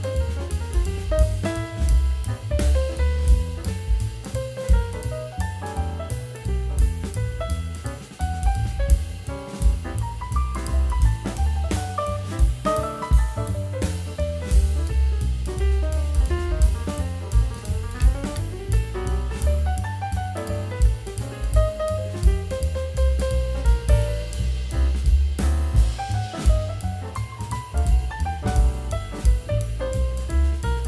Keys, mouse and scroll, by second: 2.2 double click, 2.5 shift+click, 4.1 shift+click, 16.7 double click, 18.7 double click.